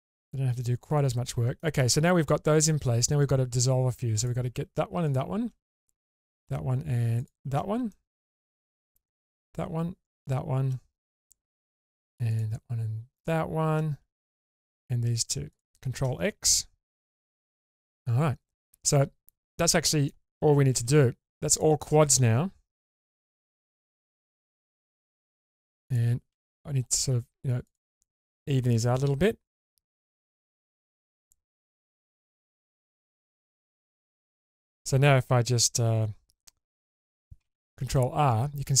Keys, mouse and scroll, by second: 0.7 shift+middle click, 2.5 middle click, 3.4-3.7 scroll up 2, 4.1 click, 5.1 shift+click, 6.2 shift+click, 7.2 shift+click, 7.9 shift+middle click, 9.3 shift+click, 10.1 shift+click, 12.3 shift+click, 13.1 shift+click, 14.4 shift+click, 15.5 shift+click, 17.1 ctrl+x, 17.8 click, 18.2 scroll down 1, 18.6-20.1 middle drag, 20.8 1, 21.5 click, 22.9 g, 23.5 g, 25.1 click, 25.9 click, 26.3 g, 26.5 g, 27.7 click, 28.3 click, 28.7 g, 29.5 g, 30.0 click, 31.9 click, 32.3 g, 32.5 g, 33.8 click, 34.1 middle click, 37.5 ctrl+r.